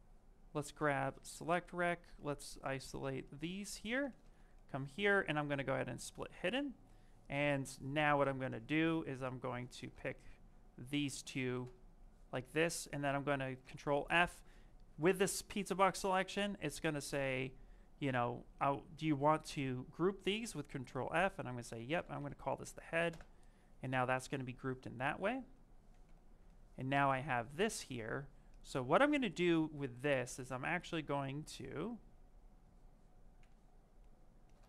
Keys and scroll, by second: 21.6-22.6 typing, 22.9 Return.